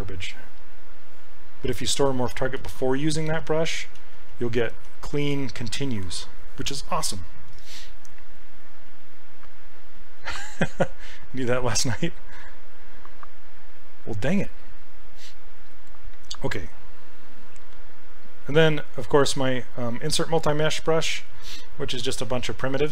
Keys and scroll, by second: 2.6 ctrl+z, 3.3 ctrl+z, 4.0 ctrl+z, 4.7 ctrl+z, 5.1 ctrl+z, 5.4 ctrl+z.